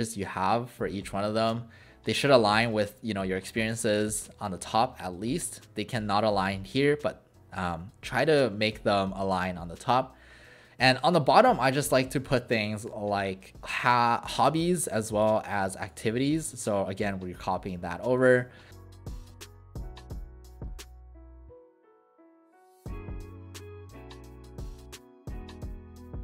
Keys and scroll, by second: 18.6-19.8 typing, 20.2 Delete, 20.3 Delete, 20.4 Delete, 21.4-26.2 typing, 23.9 ctrl+z, 24.4 Return, 24.5 Return.